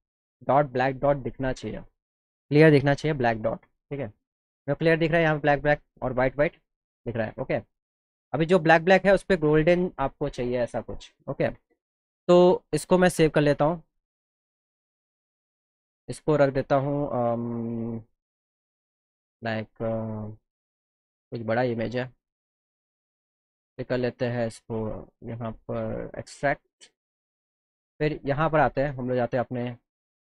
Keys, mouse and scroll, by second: 0.4 ctrl+-, 0.6 ctrl+-, 2.9 ctrl+=, 3.1 ctrl+=, 3.3 ctrl+=, 3.6 ctrl+-, 3.9 ctrl+-, 4.0 ctrl+-, 5.2 ctrl+-, 5.3 ctrl+-, 5.9 ctrl+=, 6.1 ctrl+=, 7.0 ctrl+-, 7.2 ctrl+-, 7.5 ctrl+=, 7.7 ctrl+=, 9.0 scroll up 2, 10.6 =, 12.8 click, 15.0 click, 15.6 click, 22.5 click, 23.8 click, 29.1 click.